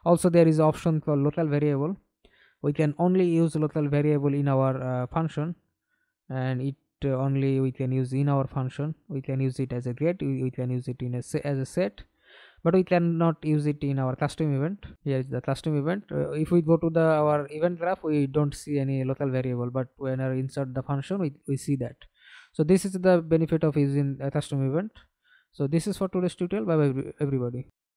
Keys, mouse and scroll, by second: 1.5-3.4 typing, 11.4 double click, 14.5 double click, 27.5 alt+F9.